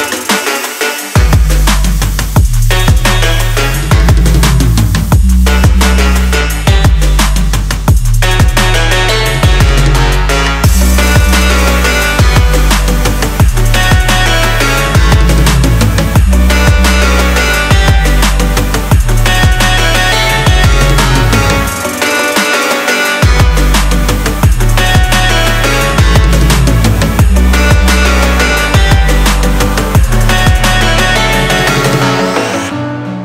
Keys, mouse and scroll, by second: 11.0 ctrl+a, 14.5 x.